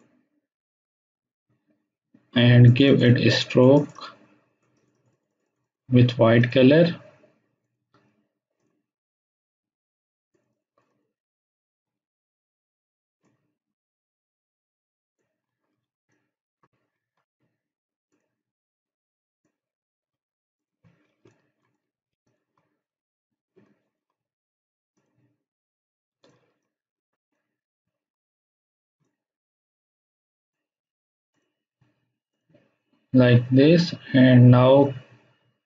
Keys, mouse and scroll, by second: 2.6-3.6 drag, 13.2-14.4 drag, 15.8 space, 16.1-16.7 ctrl+drag, 20.9-21.2 scroll up 1, 21.2 space, 21.2-24.9 ctrl+drag, 25.4-26.0 scroll up 1, 26.2 click, 26.4 space, 26.6-27.5 ctrl+drag.